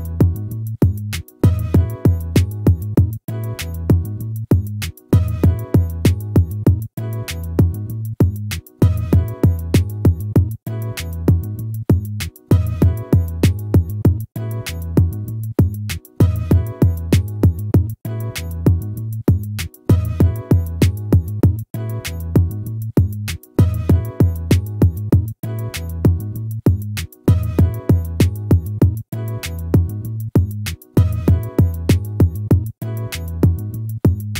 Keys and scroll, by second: 25.3 ctrl++.